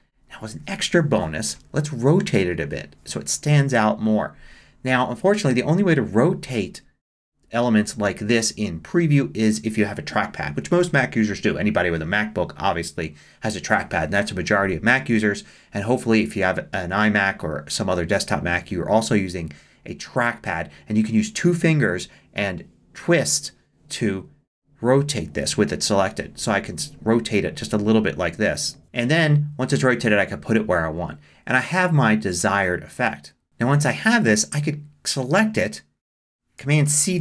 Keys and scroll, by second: 37.0 super+c.